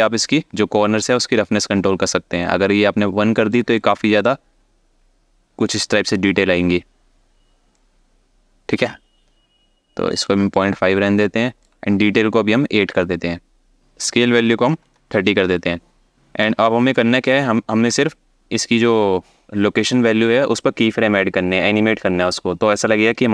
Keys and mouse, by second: 7.4-10.4 ctrl+drag, 11.4 click, 13.7 click, 16.1 click.